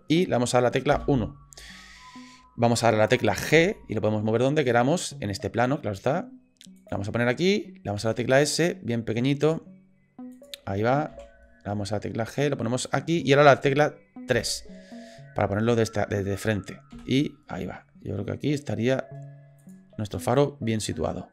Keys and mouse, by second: 0.9 KP_1, 3.5 g, 8.0 s, 11.1 g, 14.3 KP_3, 15.7 shift+middle drag, 16.9 g, 20.3 middle click.